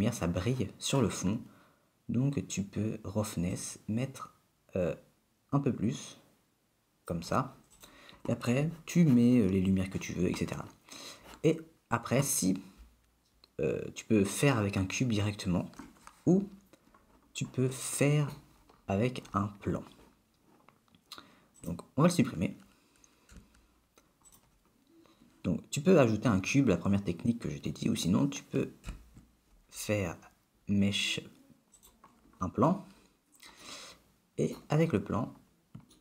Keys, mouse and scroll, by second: 3.6 click, 8.0 click, 17.9 middle click, 18.7 scroll up 3, 18.9 scroll down 3, 20.2-20.8 scroll down 3, 21.7 click, 23.5 x, 26.7-28.1 scroll up 1, 28.8 shift+a, 33.1-33.8 scroll up 3, 33.8 middle click, 34.8 middle click, 35.1 scroll up 1, 35.4-35.9 scroll down 2.